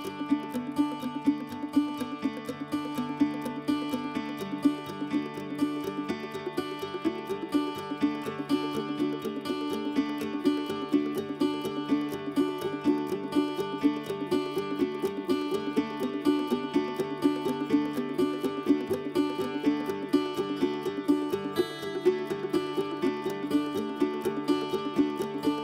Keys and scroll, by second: 24.2 h.